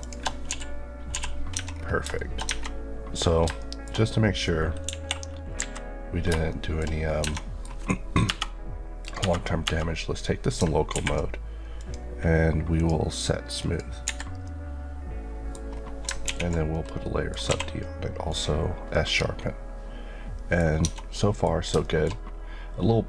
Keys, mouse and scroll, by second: 0.0 shift+click, 1.1 typing, 1.5 Tab, 1.7-2.2 scroll down 2, 2.2 shift+middle click, 2.4-3.2 shift+scroll up 2, 3.2-3.6 scroll up 2, 3.6 shift+middle click, 4.8 KP_1, 5.6 KP_3, 6.8 shift+middle click, 7.0 scroll up 1, 7.2 Tab, 7.4 middle click, 8.3 KP_Divide, 11.8 click, 14.0 Escape, 14.4 middle click, 15.8-16.2 scroll down 2, 16.3 ctrl+1, 16.7 middle click, 17.5 q, 18.3 click, 18.9 middle click, 20.7 scroll up 1, 20.9 Tab, 21.1 middle click, 21.6 scroll up 1, 21.8 shift+middle click, 22.2-23.0 scroll up 1.